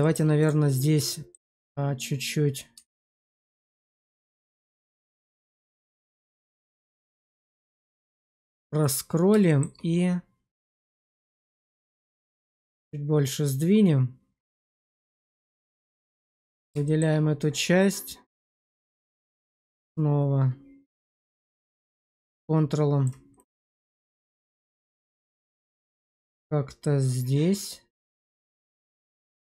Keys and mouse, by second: 1.0 middle click, 2.7 q, 4.1 click, 5.5 click, 5.9 q, 8.8 click, 9.4 shift+middle click, 10.7 click, 14.8 shift+2, 15.4 shift+middle drag, 15.7 alt+middle click, 16.8 shift+middle drag, 19.5 click, 23.3 right click, 24.6 click.